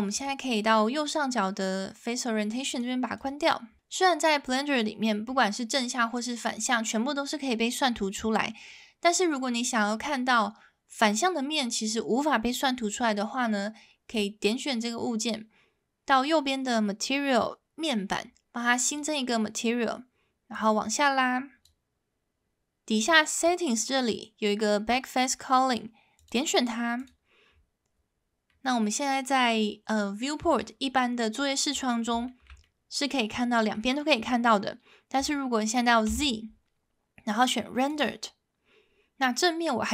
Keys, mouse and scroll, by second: 0.3-3.1 drag, 5.7-8.7 middle drag, 14.1 click, 18.9 click, 20.6-21.7 drag, 23.2 click, 26.1 click, 28.5-30.6 middle drag, 32.2 shift+middle click, 32.6-33.7 middle drag, 36.1 z.